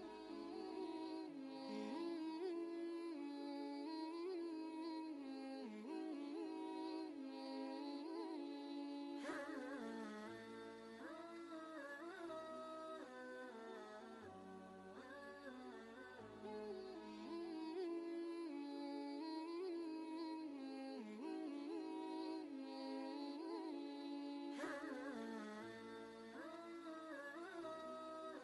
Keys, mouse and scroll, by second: 2.2 ctrl+space, 2.3 ctrl+click, 2.7 ctrl+space, 3.4 ctrl+space, 3.5 ctrl+click, 4.0 ctrl+space, 4.8 space, 6.8 click, 7.0 right click, 8.7 click, 10.7 right click, 11.8 click, 15.4 Down, 18.6 click.